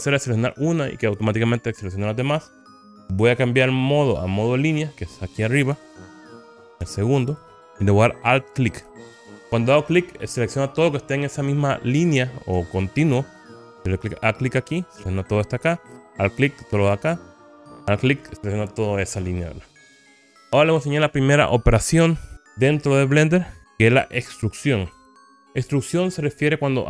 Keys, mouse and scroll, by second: 4.7 click, 7.2 click, 8.8 alt+click, 13.7 alt+click, 15.7 alt+click, 17.7 alt+click, 20.1-20.5 scroll down 4, 22.1 KP_1, 24.1 shift+middle click.